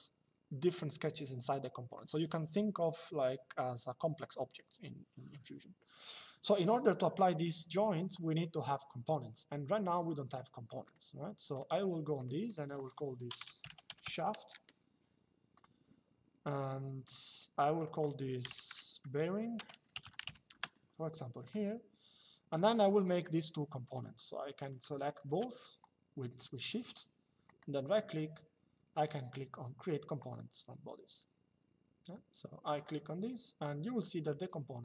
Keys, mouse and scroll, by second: 10.5 click, 13.1 shift+s, 15.3 click, 16.7 click, 18.4 shift+e, 19.3 a, 19.9 n, 20.2 Return, 22.7 click, 27.2 right click, 32.5 click, 34.0 click.